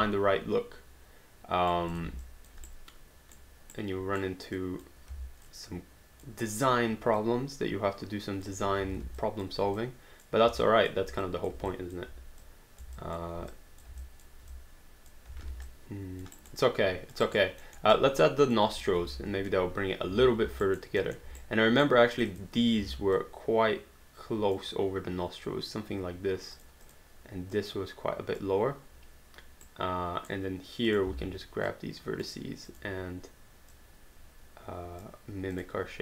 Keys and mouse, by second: 0.0 alt+click, 1.9 click, 2.3 alt+click, 2.7 right click, 3.9 right click, 4.6 click, 5.1 w, 5.5 click, 7.2 click, 8.8 ctrl+z, 9.2 alt+click, 10.7 alt+click, 11.7 alt+click, 14.0 alt+click, 15.4 alt+d, 15.7 alt+click, 16.4 alt+right click, 16.7 alt+click, 17.2 alt+right click, 17.7 alt+middle click, 17.9 alt+click, 19.1 space, 20.7 alt+right click, 21.0 alt+middle click, 21.4 right click, 22.2 click, 22.8 w, 23.2 click, 26.5 click, 29.7 right click, 30.9 click, 31.1 w, 31.7 click, 35.6 click.